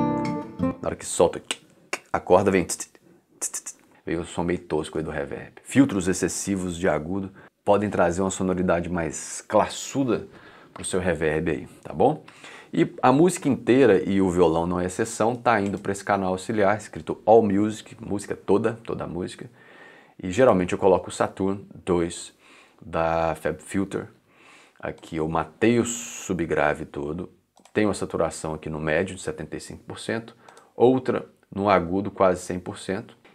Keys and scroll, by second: 0.2 space, 12.2 c.